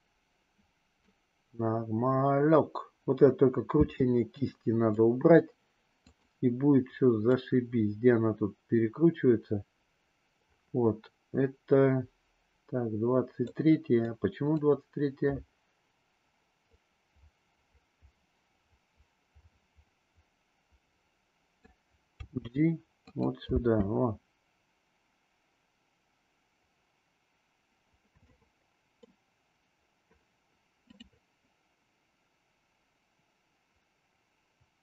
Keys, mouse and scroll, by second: 3.8 space, 4.5-4.9 middle drag, 6.1 click, 7.3-13.6 drag, 14.0-14.4 drag, 16.7-21.7 drag, 22.2 g, 23.6 space, 28.3-29.1 middle drag, 30.8 click.